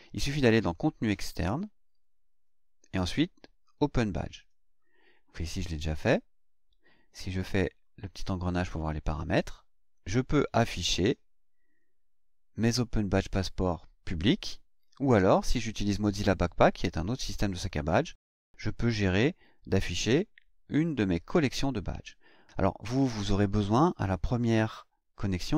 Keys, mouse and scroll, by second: 0.6 click, 1.4-1.7 scroll down 2, 7.8 click.